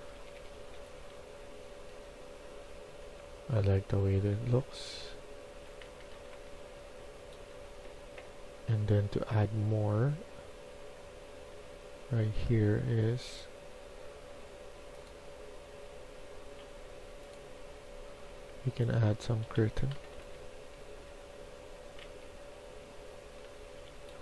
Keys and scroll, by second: 0.0-7.0 typing, 0.0 Escape, 0.3 Escape, 18.2-22.0 typing, 23.4 typing.